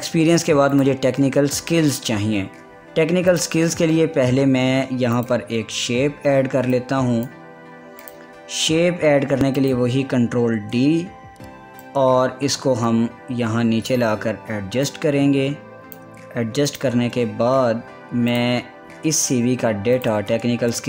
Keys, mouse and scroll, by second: 0.5 scroll down 1, 1.3 click, 4.0 click, 6.1-8.7 drag, 11.3 ctrl+d, 12.5-17.4 drag, 17.6 ctrl+a, 18.9 click, 19.0 click, 19.9 click.